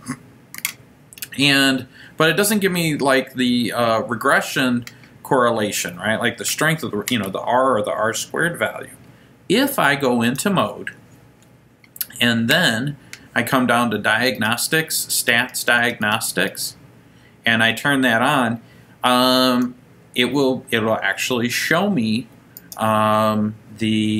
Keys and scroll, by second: 14.5 Down, 14.7 Down, 14.9 Down, 15.1 Down, 15.3 Down, 15.5 Down, 15.7 Down, 15.9 Down, 16.1 Down, 16.6 Down, 17.8 Right, 19.6 Return.